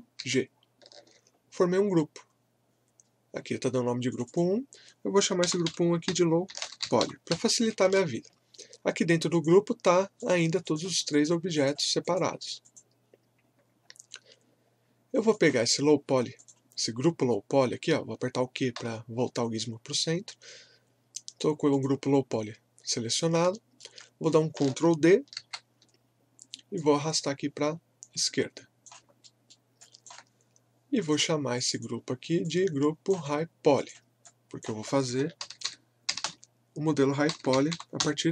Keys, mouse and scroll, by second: 0.2 ctrl+g, 4.1 click, 5.2-7.8 typing, 7.9 Return, 9.3 click, 13.8 scroll down 1, 15.3 click, 18.7 q, 21.7 click, 23.2 scroll up 1, 23.5 alt+middle click, 25.4 ctrl+d, 26.7 click, 26.8-29.2 drag, 29.2 alt+middle click, 29.9-35.4 alt+drag, 35.2-38.3 typing.